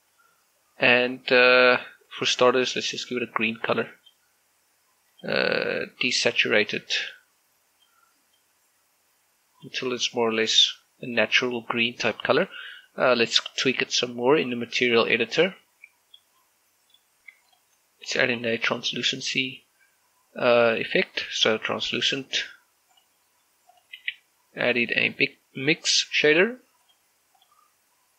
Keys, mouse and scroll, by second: 0.0-0.1 typing, 0.4 Return, 2.9-10.9 drag, 10.9 scroll down 1, 11.2 middle click, 11.7 scroll up 1, 13.9 scroll down 1, 14.7-16.7 drag, 16.7 middle click, 18.3 click, 18.5 g, 18.9 click, 19.2 shift+a, 23.7 click, 24.8 shift+a, 27.7 click.